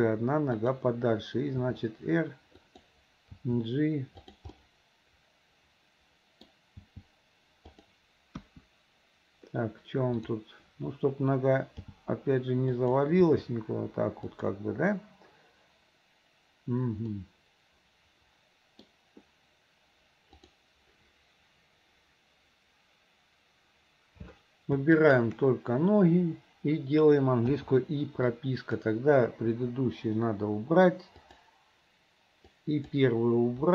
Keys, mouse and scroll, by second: 0.2 g, 1.7 r, 3.4 g, 4.6-6.5 middle drag, 8.3 g, 9.1 KP_1, 10.2 click, 13.1 g, 13.7 g, 17.2-17.7 scroll up 1, 17.7-18.9 middle drag, 18.9 scroll down 1, 20.4 click, 25.1 shift+click, 27.6 i, 28.3-28.8 drag, 29.5 Delete, 31.3 click, 32.5-32.9 drag.